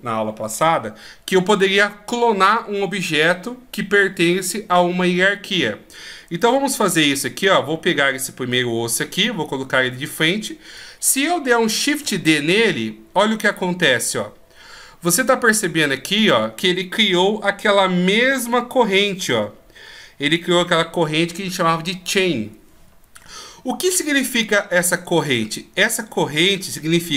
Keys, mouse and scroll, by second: 5.2-6.6 scroll up 2, 6.6-8.5 scroll up 2, 8.5 KP_1, 11.8 shift+d.